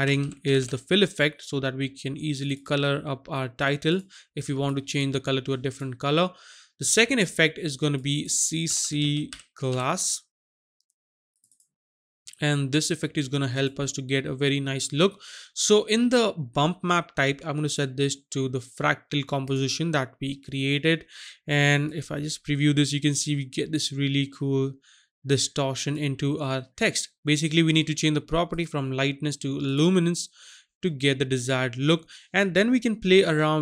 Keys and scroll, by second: 0.2-0.5 typing, 8.7 c, 8.8 c, 9.2 g, 9.6 l.